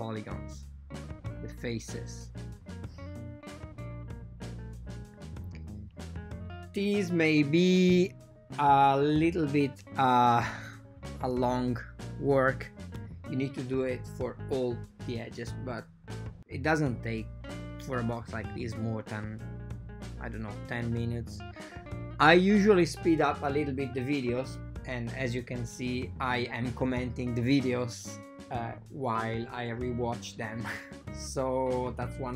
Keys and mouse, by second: 2.2 click, 2.3 g, 3.1 right click, 3.7 g, 6.1 right click, 6.3 g, 7.5 g, 8.9 click, 9.7 g, 9.9 click, 12.0 a, 13.1 shift+KP_7, 14.9 right click, 15.5 typing, 15.9 click, 17.2 click, 17.5 g, 18.6 g, 21.5 g, 21.8 click, 22.4 g, 22.9 click, 23.3 g, 24.6 right click, 24.8 g, 30.0 a, 30.1 a, 31.0 ctrl+middle click.